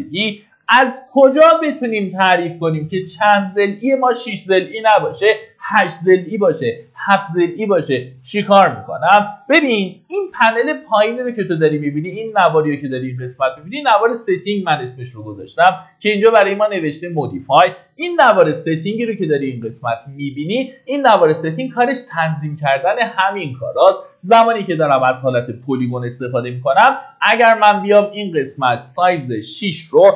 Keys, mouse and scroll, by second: 10.0 ctrl+shift+d, 28.4 click.